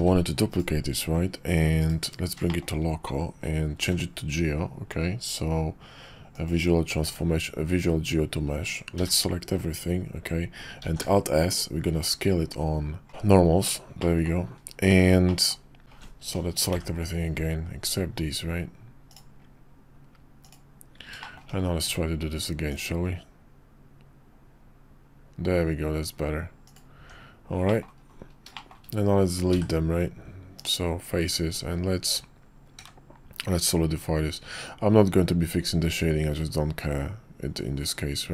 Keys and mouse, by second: 0.0 shift+d, 1.8 /, 2.5 shift+click, 3.8 ctrl+a, 7.0 Tab, 8.9 a, 10.8 alt+s, 13.1 middle click, 14.0 middle click, 15.2 middle click, 15.8 ctrl+alt+shift+z, 16.7 ctrl+i, 19.2-20.5 drag, 21.2 shift+click, 21.4 shift+middle click, 21.8 q, 26.9 Tab, 27.7 click, 27.8 middle click, 28.5 shift+click, 29.5 x, 31.5 Tab, 32.8 q.